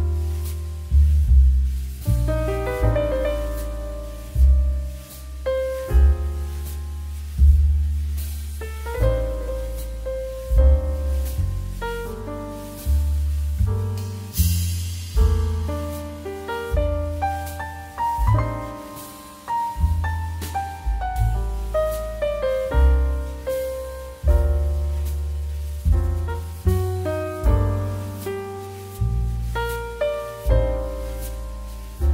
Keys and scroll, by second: 2.0-2.8 typing, 6.2 KP_3, 6.3 KP_Decimal, 7.1 KP_5, 9.3 Delete, 18.1 ctrl+[, 19.3 ctrl+space, 24.5 space, 25.2 z, 28.8 space.